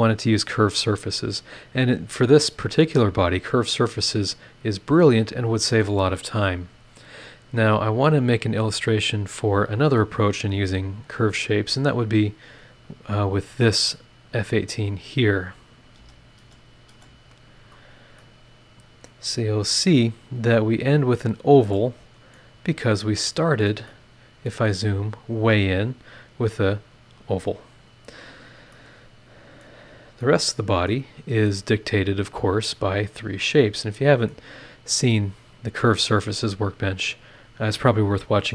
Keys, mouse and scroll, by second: 2.8-4.7 middle drag, 4.7 scroll up 2, 7.4 click, 8.6 click, 9.1 click, 10.9 space, 11.3 space, 17.7 click, 18.2-19.2 middle drag, 18.3 click, 18.3 right click, 19.2-19.8 scroll up 2, 20.2 scroll up 1, 21.4 scroll down 1, 21.7 middle click, 21.8 click, 21.8 right click, 22.5 scroll down 1, 23.1 middle click, 23.2 scroll up 1, 23.9 middle click, 23.9 scroll up 1, 24.0 right click, 24.7-26.2 scroll up 5, 26.9 click, 27.5-28.2 scroll down 2, 28.4 scroll down 2, 28.7-29.8 middle drag, 28.8 click, 28.8 right click, 29.8 scroll down 1, 30.2 middle click, 30.5 click, 33.6 scroll up 1, 33.7 middle click, 34.9 scroll up 2.